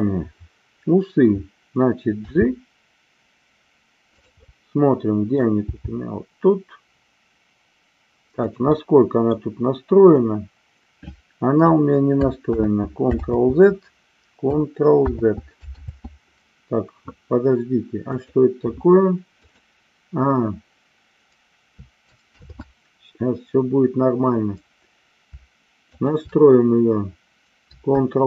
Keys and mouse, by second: 2.1 g, 4.2 click, 4.4 middle click, 5.6 g, 8.4 click, 8.7-9.4 middle drag, 12.4 ctrl+z, 13.2 ctrl+z, 15.8 ctrl+z, 18.0 click, 22.3 ctrl+shift+z, 25.9 shift+click.